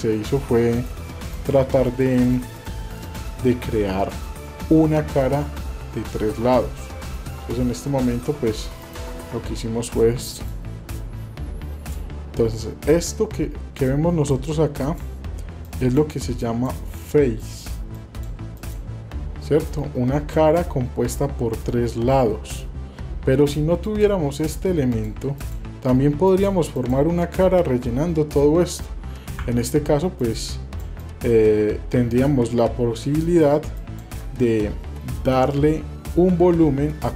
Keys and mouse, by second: 14.3 click, 15.7 click, 16.4 click, 17.4 click, 17.9 click, 18.6 click, 19.7 click, 23.9 click, 23.9 typing, 24.3 click, 24.9 click, 25.4 click, 26.3 click, 26.7 click, 30.2 ctrl+click, 31.0 ctrl+click, 32.1-33.4 ctrl+drag, 33.8 ctrl+click.